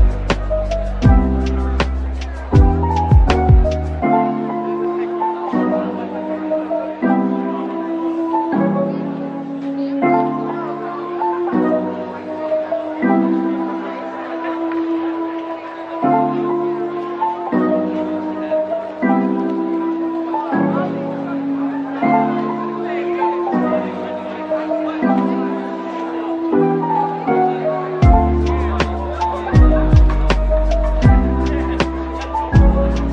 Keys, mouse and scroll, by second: 0.1 Tab, 1.9-2.7 scroll, 2.7-3.9 scroll down 1, 3.9 a, 4.7 Tab, 5.3 middle click, 6.0-9.9 scroll up 1, 9.9 middle click, 11.8 Tab, 13.0 a, 14.3 double click, 16.2 ctrl+l, 19.2 typing, 24.9-26.6 typing, 29.5-29.9 typing, 31.0 typing.